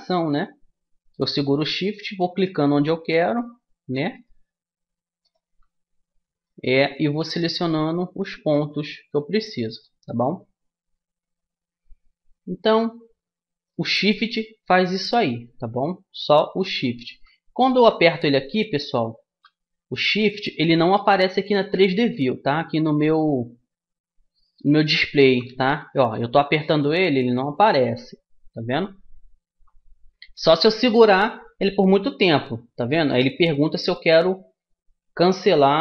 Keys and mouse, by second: 0.3-1.5 middle drag, 1.5-9.5 right drag, 9.5 middle click, 10.1-11.9 right drag, 14.1-17.5 middle drag, 20.9-28.0 middle drag.